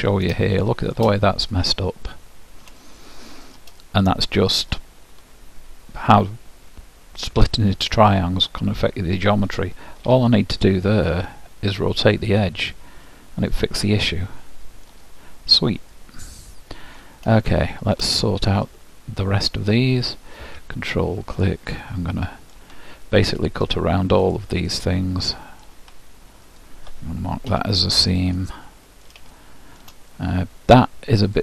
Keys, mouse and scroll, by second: 0.5-1.7 middle drag, 1.7-3.4 drag, 3.4-5.6 middle drag, 10.2 ctrl+e, 13.2-14.9 middle drag, 15.2 scroll down 1, 15.4-20.7 middle drag, 20.2-26.2 drag, 22.0-23.8 middle drag, 24.8 middle click, 25.9 middle click, 26.6-28.3 drag, 28.3-29.6 middle drag, 31.3-31.4 drag.